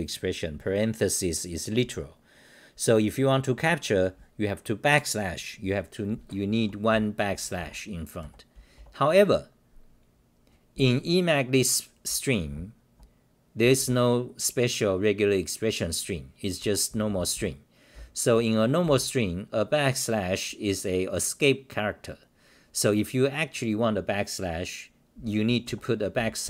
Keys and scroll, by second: 6.9-8.5 typing, 12.5-13.8 typing, 16.6 Home, 16.9 h, 17.9 n, 25.4-26.4 typing.